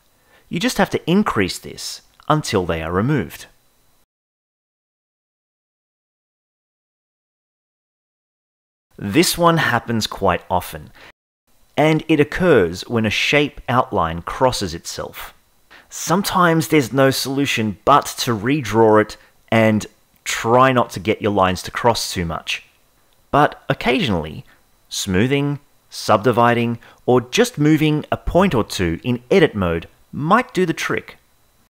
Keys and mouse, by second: 1.2-3.1 drag, 10.7-13.3 drag, 13.8 Tab, 13.8 a, 16.9-23.7 drag, 25.2-26.5 right drag, 29.2 click, 29.7 click, 30.3 click.